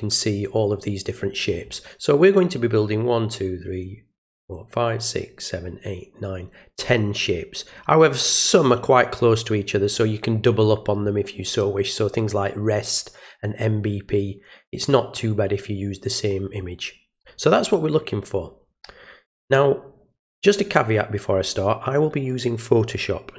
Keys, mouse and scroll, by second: 17.5 click.